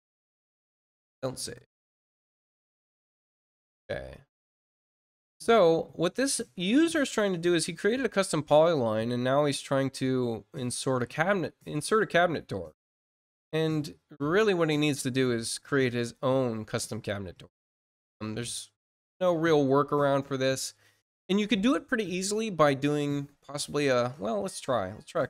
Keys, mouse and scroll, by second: 7.0-7.5 scroll down 4, 10.8 scroll down 2, 11.6-11.9 scroll down 2, 12.2 scroll down 2, 13.2-13.5 scroll down 2, 14.3-14.7 scroll down 2, 15.0 scroll down 2, 15.7 scroll down 2, 16.3-17.0 scroll down 4, 17.5-18.2 scroll up 4, 18.8-19.2 scroll up 2, 19.6 scroll up 2, 20.3 scroll up 2.